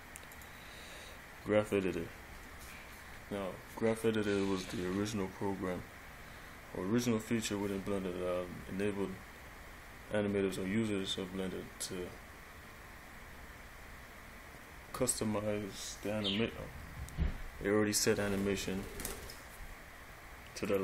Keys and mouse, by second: 0.5 click.